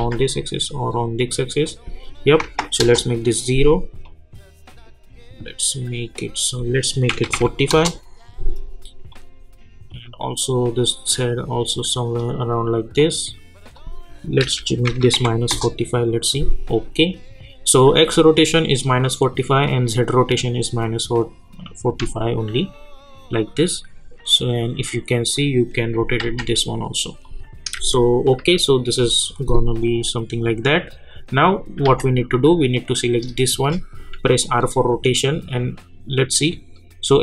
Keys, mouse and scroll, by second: 0.3-2.0 drag, 2.8 Return, 4.0-6.5 drag, 7.7 Return, 9.1-12.9 drag, 14.4 -, 15.5 Return, 19.6 click, 23.4-26.2 drag, 26.2 ctrl+z, 27.2 click, 27.7-28.3 typing, 29.8-31.8 drag, 31.8 v, 32.6 click, 34.3 r, 35.2-37.2 drag.